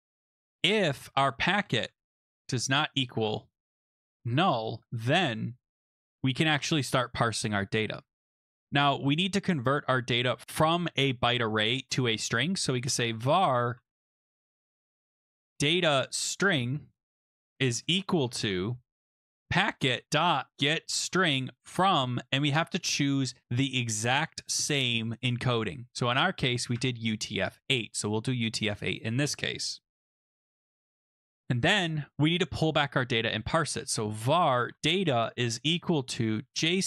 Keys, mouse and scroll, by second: 0.0-5.2 typing, 12.4-21.6 typing, 22.4 Down, 23.4 Up, 26.0 Down, 26.7 Tab, 28.6 Return, 33.4-36.8 typing.